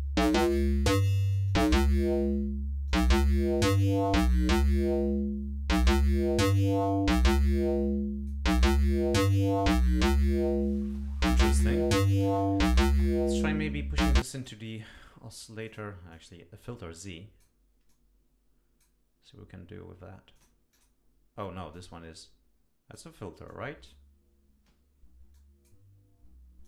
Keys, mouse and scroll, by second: 2.9 click, 3.6 click, 4.4-8.5 drag, 14.1 click, 15.7 click, 16.1-17.6 drag, 17.9-19.0 drag, 20.4 click, 20.7 click, 21.7-23.1 drag, 23.5 click, 25.3 click, 26.6 click.